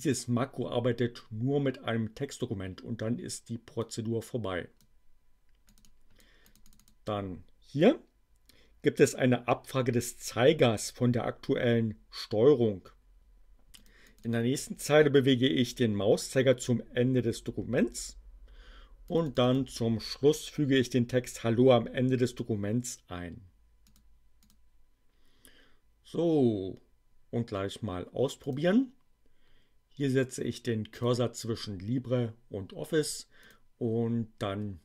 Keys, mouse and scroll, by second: 3.8-5.0 drag, 5.7-7.0 drag, 13.8 click, 18.9 click, 23.8 click, 24.4 click, 28.4 click, 31.0 click, 33.4 click.